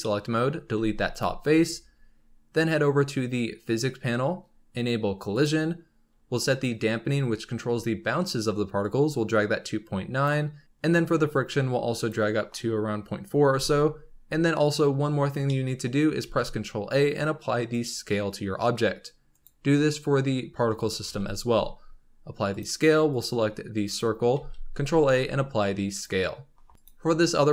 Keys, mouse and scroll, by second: 0.0 middle click, 0.7 x, 1.5 Tab, 3.6 click, 5.3-8.3 drag, 8.8-13.4 drag, 13.4 n, 15.4-16.2 middle drag, 16.2 ctrl+a, 19.2 click, 21.0 ctrl+a, 23.0 click, 23.8 click, 24.3 ctrl+a, 26.7 click.